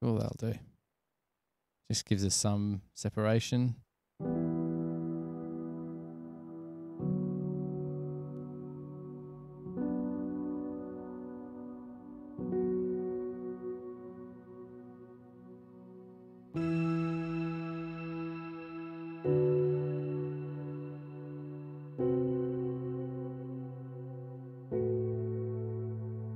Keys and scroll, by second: 1.9 super+[, 2.1 super+[, 3.2 super+], 9.4 super+=.